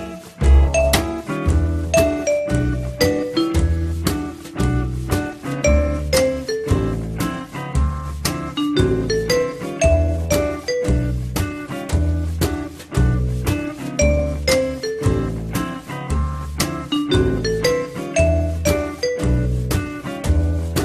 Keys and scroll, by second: 15.6 r, 19.5 f.